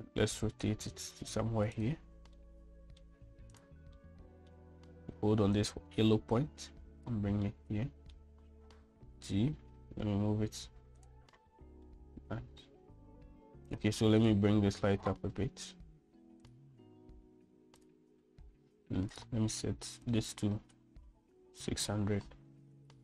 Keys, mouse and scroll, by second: 0.1 middle drag, 1.4-2.6 drag, 3.1-3.8 middle drag, 4.7-5.3 middle drag, 6.4-7.9 drag, 8.3 middle click, 9.8 g, 12.4 middle click, 15.0 click, 15.9 g, 18.5 click, 20.0-23.0 drag.